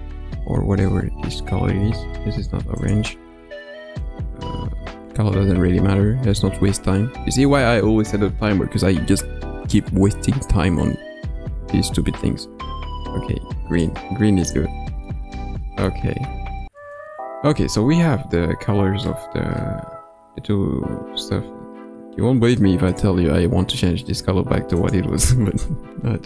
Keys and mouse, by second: 0.1 KP_0, 14.4 click, 15.0-15.9 middle drag, 16.7 KP_0, 22.8 click.